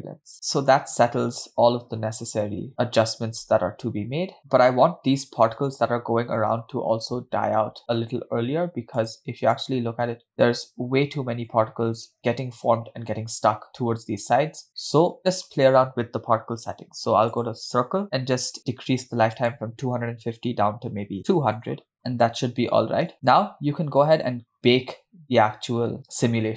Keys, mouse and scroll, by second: 0.3-0.8 scroll up 12, 1.3 space, 7.5 space, 9.3 click, 10.1 click, 10.8 scroll up 2, 11.6-12.1 scroll down 2, 12.2-12.5 shift+middle drag, 12.9-13.3 scroll up 1, 14.3 scroll down 1, 15.0-15.4 shift+middle drag, 17.6 click, 19.6-22.0 drag, 21.2 BackSpace, 21.8 0, 22.3 space, 23.0-23.5 scroll down 3, 24.0 space.